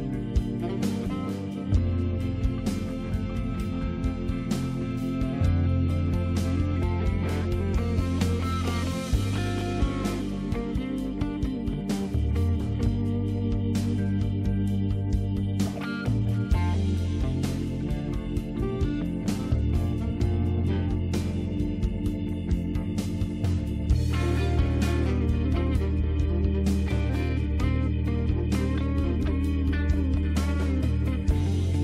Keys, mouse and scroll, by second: 0.7 click, 3.6 click, 5.1 click, 6.3 click, 10.3 click, 17.7-19.1 scroll down 2, 20.6 click, 24.4 click, 27.5 click, 29.4 scroll up 2, 29.7 click, 29.8 click, 30.2 click, 30.4 click, 30.8 click, 30.9 scroll up 2, 31.1 scroll down 2, 31.5 click.